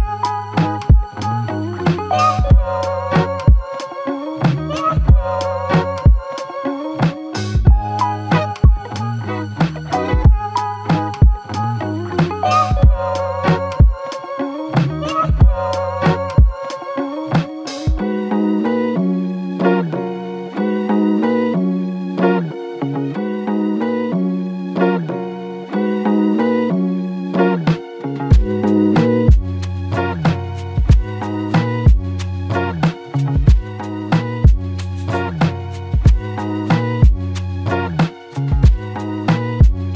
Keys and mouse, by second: 0.3 f, 1.4 alt+click, 11.9 ctrl+alt+click, 13.5 double click, 22.4 shift+click, 23.7 shift+click, 25.5 f, 26.9 double click.